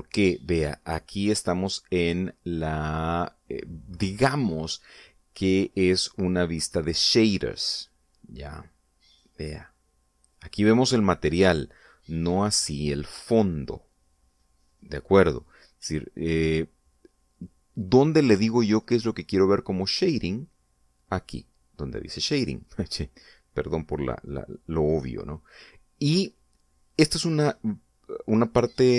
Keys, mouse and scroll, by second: 9.3 click, 9.5 middle click, 9.7-11.8 drag, 12.1 scroll up 2, 23.2 click.